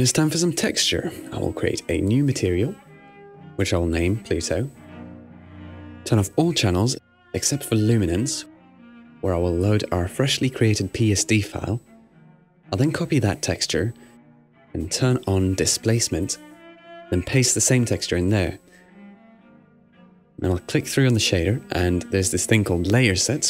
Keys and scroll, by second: 4.3-5.7 typing, 11.0 Right, 11.3 Return.